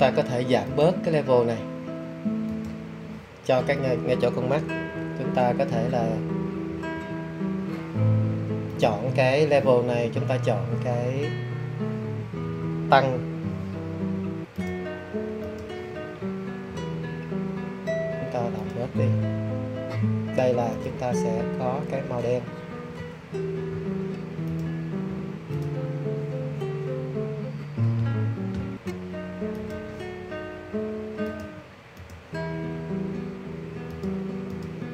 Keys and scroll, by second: 6.6 ].